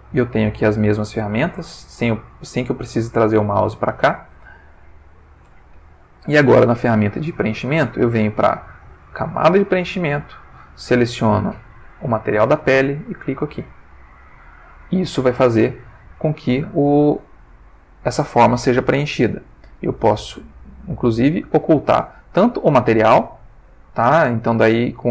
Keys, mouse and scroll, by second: 1.6 shift+space, 4.0 shift+space, 4.9 click, 8.9 click, 10.4 click, 11.7 click, 13.5 click, 15.2 ctrl+middle click, 17.4 ctrl+middle click, 22.7 click, 23.8 click.